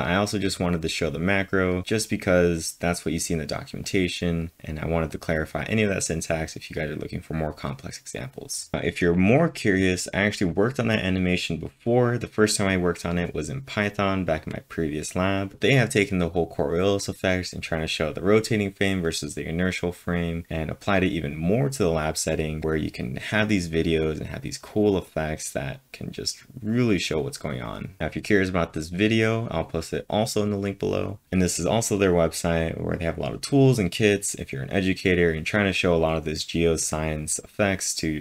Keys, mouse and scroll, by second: 0.4-0.8 scroll up 1, 1.9 click, 3.8 click, 4.2-4.9 typing, 4.4 click, 4.7 click, 8.5 scroll down 2, 22.6 click, 28.0 click.